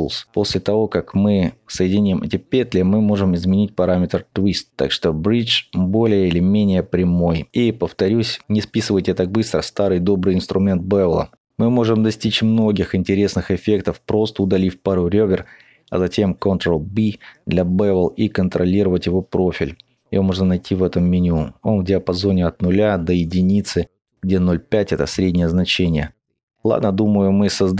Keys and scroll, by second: 12.7 typing, 13.7 ctrl+alt+x, 14.7 ctrl+x, 15.5 ctrl+x, 16.4 typing, 17.4 ctrl+b.